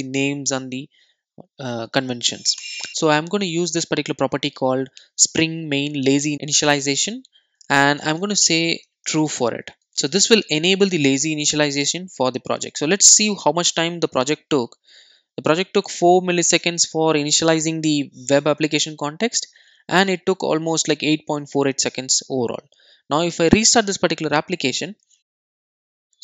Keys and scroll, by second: 2.6 Return, 10.1 super+s, 23.0 super+r.